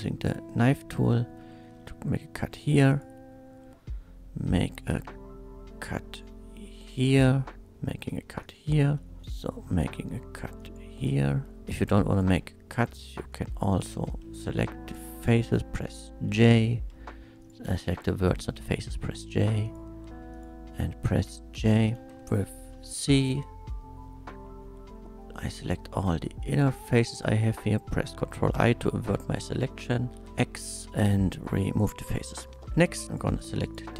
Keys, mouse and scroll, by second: 0.5 click, 1.1 space, 2.4 k, 2.9 click, 6.9 click, 8.4 click, 8.8 space, 9.2 k, 9.4 click, 10.6 click, 11.0 space, 11.6 1, 12.1 click, 12.9 click, 13.7 shift+click, 15.6 j, 16.5 click, 17.4 shift+click, 18.8 j, 19.6 click, 20.3 shift+click, 21.5 j, 22.2 3, 22.7 c, 23.2-26.9 drag, 28.6 ctrl+i, 30.2 x, 31.6 click, 32.6 shift+2, 33.1 click, 33.4 click, 33.4 shift+2, 33.7 click.